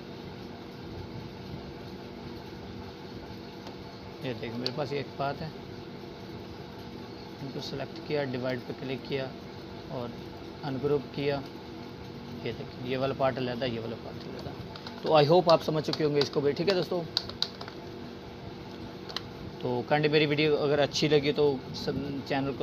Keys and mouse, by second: 5.2 Escape, 6.0-8.5 drag, 15.4 ctrl+z, 19.8 Delete, 21.1 click.